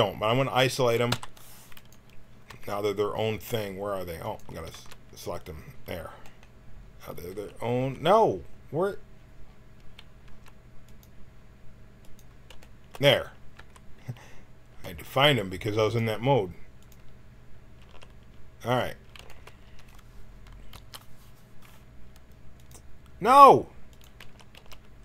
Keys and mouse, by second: 1.1 p, 2.5 Tab, 4.2 click, 4.7 Tab, 7.2 a, 7.7 a, 10.3 Tab, 10.8-16.7 drag, 13.5 Tab, 17.0 click, 17.8 a, 19.6 a, 20.7 l, 22.8-25.0 drag, 24.1 a, 24.5 a.